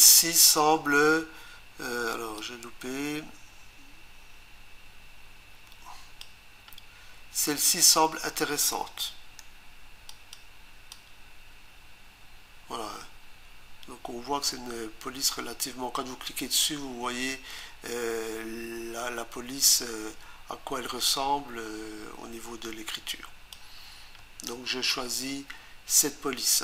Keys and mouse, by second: 2.4 click, 10.1 click, 10.9 click, 24.2 Return.